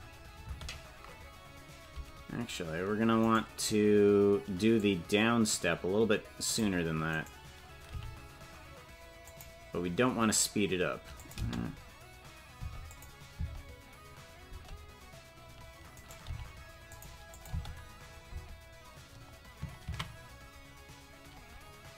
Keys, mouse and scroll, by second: 0.9-1.6 scroll up 1, 0.9 space, 1.6-2.2 scroll up 1, 3.3 right click, 4.8-6.7 drag, 7.1 right click, 7.9 g, 11.2-12.7 drag, 11.4 space, 12.7 space, 12.9 click, 13.4 space, 15.0 space, 16.1 right click, 16.3 g, 17.4 click, 17.5 space, 18.4 space.